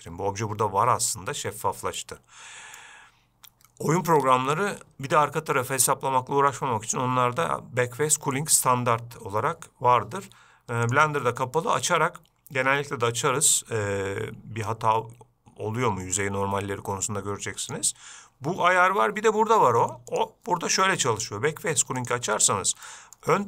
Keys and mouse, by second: 11.2-19.3 drag, 20.4-22.6 drag, 23.1 middle drag.